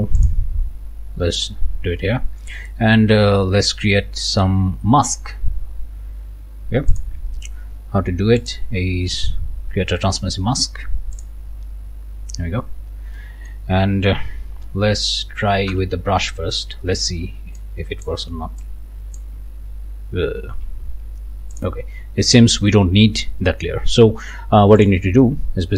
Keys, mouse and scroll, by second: 0.2 click, 2.6 click, 8.4 click, 11.2 click, 12.5 scroll down 1, 13.2 click, 15.7 b, 17.6 shift+click, 18.6 shift+click, 20.5 ctrl+z, 21.6-23.0 drag, 23.0 scroll up 1, 24.8 click.